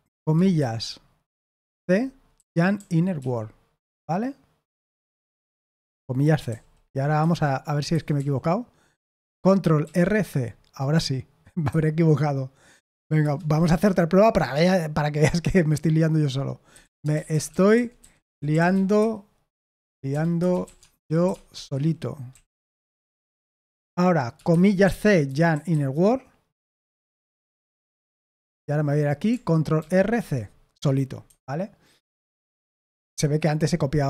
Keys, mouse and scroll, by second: 2.0-3.6 typing, 6.1-8.1 typing, 7.9 Escape, 9.8 ctrl+r, 10.2 c, 11.6 Escape, 12.8 o, 13.2 Return, 16.4-23.5 typing, 25.0-26.1 typing, 28.2 typing, 28.5 Return, 28.7 Return, 29.7 ctrl+r, 30.1 c, 31.2 Escape.